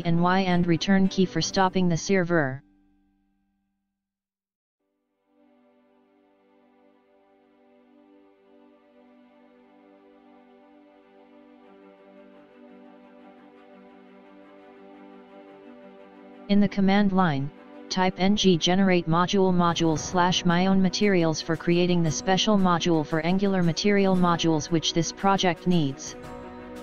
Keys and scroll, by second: 2.5 ctrl+c, 14.6 space, 18.6 space.